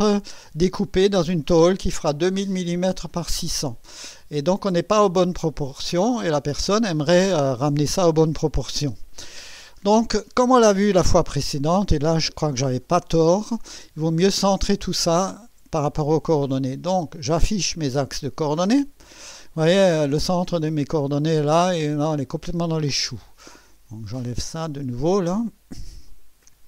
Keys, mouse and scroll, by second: 11.0 scroll down 1, 11.5-12.3 right drag, 17.1 click, 18.8 click, 20.1-20.8 right drag, 24.6 click, 26.1 click.